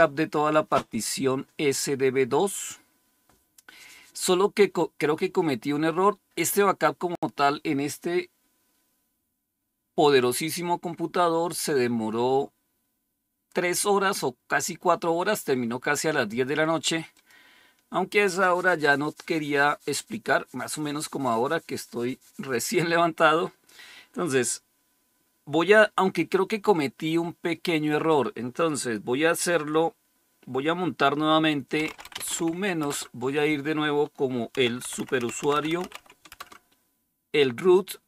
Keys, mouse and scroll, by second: 17.0 click, 27.8-28.8 drag, 31.5-32.7 typing, 34.2-36.2 typing.